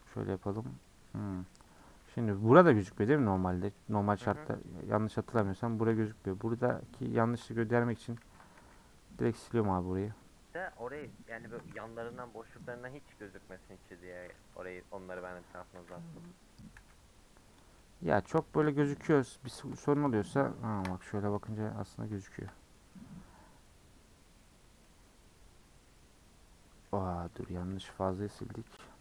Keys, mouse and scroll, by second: 0.0 1, 0.2-1.2 middle drag, 1.2 3, 1.5-3.0 middle drag, 3.0 scroll down 1, 3.1 middle click, 4.1-4.6 scroll up 1, 4.6 alt+click, 6.6 click, 7.4 ctrl+click, 7.8 x, 8.2 ctrl+z, 9.3 x, 9.5 middle click, 10.0 click, 10.5 middle click, 11.3 ctrl+click, 12.1 x, 12.4-13.8 middle drag, 13.8 scroll down 2, 14.1 middle click, 14.6 Tab, 14.7-16.7 middle drag, 16.7 /, 17.2-17.6 scroll up 1, 17.6 click, 17.8-19.1 middle drag, 19.1-19.5 scroll down 7, 19.5-19.9 shift+middle drag, 19.9 click, 20.7 KP_Decimal, 21.5 scroll up 4, 21.7 scroll down 1, 21.8-22.2 scroll up 4, 22.2 shift+middle click, 22.7 middle click, 23.0-23.6 scroll up 7, 23.6-24.4 middle drag, 24.4-24.8 scroll down 4, 24.8-27.4 middle drag, 27.4 ctrl+z, 27.7 ctrl+z, 28.0 ctrl+z, 28.3 ctrl+z, 28.7 ctrl+z.